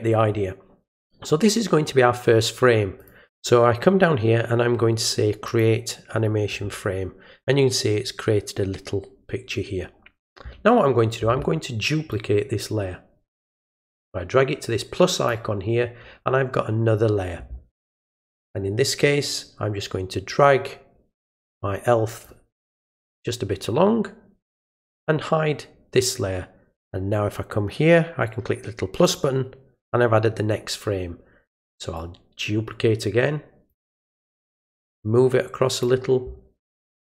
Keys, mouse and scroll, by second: 3.0 click, 5.5 click, 12.1-15.3 drag, 20.3-22.3 drag, 24.6 click, 29.1 click, 32.0-33.7 drag, 34.8-35.8 drag.